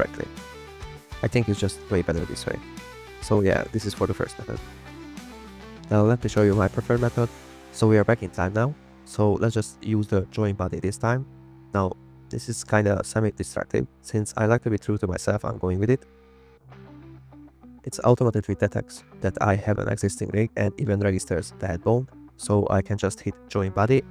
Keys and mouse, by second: 0.0 z, 0.4 x, 2.6 click, 2.8 click, 2.9 click, 3.1 a, 3.3 alt+r, 3.4 alt+g, 3.6 drag, 4.6 click, 4.7 g, 5.0 click, 5.2 g, 5.6 click, 6.0 g, 6.2 click, 7.0 drag, 7.2 g, 15.4 click, 17.1 click, 20.8-24.1 drag.